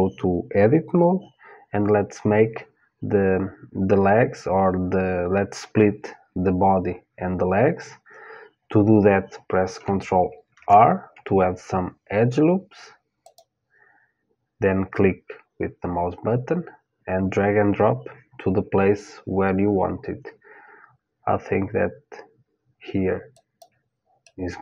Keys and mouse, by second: 10.1 ctrl+r, 23.8-24.6 middle drag.